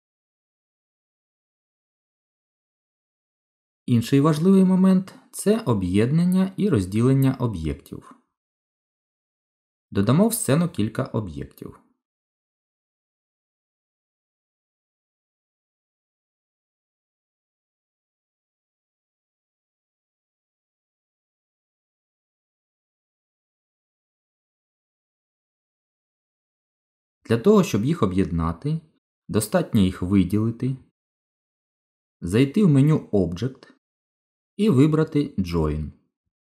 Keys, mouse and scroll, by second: 1.0 Tab, 2.8 Delete, 10.4 shift+a, 13.4 shift+a, 15.9 shift+a, 18.4 g, 19.5 click, 20.0 g, 21.0 click, 21.2 middle click, 27.8 click, 29.4 shift+click, 30.5 click, 33.7 click.